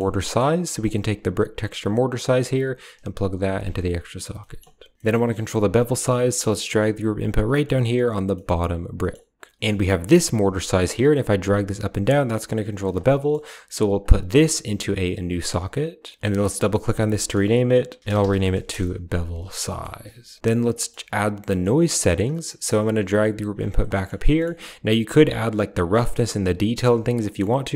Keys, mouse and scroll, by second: 0.1 middle click, 0.7 click, 2.3-3.3 drag, 4.3 middle click, 4.9 ctrl+z, 4.9 middle click, 5.6 middle click, 6.3 g, 7.4 middle drag, 7.5 drag, 8.2 middle click, 8.3 click, 8.9 middle click, 9.6 middle click, 11.0-12.8 shift+drag, 13.1 middle drag, 13.9-15.3 drag, 16.4-18.6 drag, 19.6 middle click, 20.6 middle click, 21.3 middle click, 22.1 click, 22.3 middle click, 22.7 g, 23.8 middle click, 25.3 click, 26.1 click, 27.2 middle click.